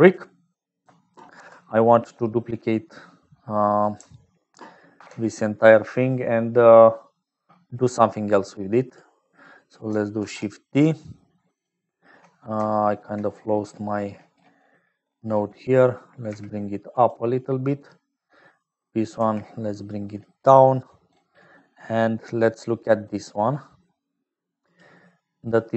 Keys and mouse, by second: 0.0-25.7 typing, 0.0 click, 1.3 alt+p, 4.9 alt+p, 6.9 click, 8.3 click, 14.5 click, 14.9 click, 17.6 click, 18.5 click, 20.8 click, 22.4 click, 23.5-24.9 drag, 25.3 click.